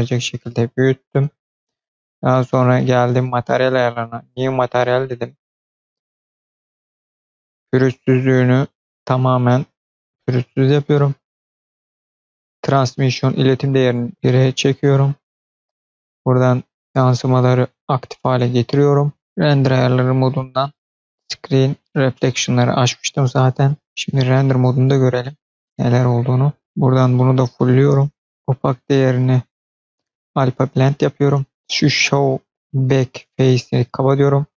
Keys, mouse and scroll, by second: 0.9 click, 2.7 click, 4.0 click, 6.1-7.0 scroll down 5, 7.1-8.6 scroll down 2, 8.6 click, 9.7-10.3 scroll down 3, 12.8-13.8 drag, 14.1-15.5 scroll down 4, 16.1 click, 19.2 click, 19.9-21.2 scroll down 1, 24.6 click, 25.5 middle click, 26.9 click, 28.2-30.5 drag, 28.2 scroll down 10, 31.4-33.9 scroll down 2, 33.9 click.